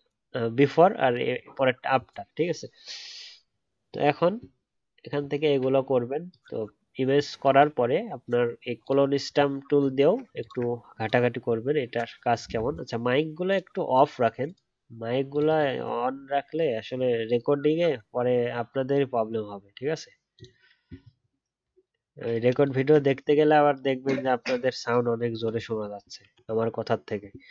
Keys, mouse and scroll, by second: 9.9-10.3 alt+scroll up 2, 10.3 alt+click, 12.3-13.5 alt+scroll down 1, 21.8 alt+scroll up 1.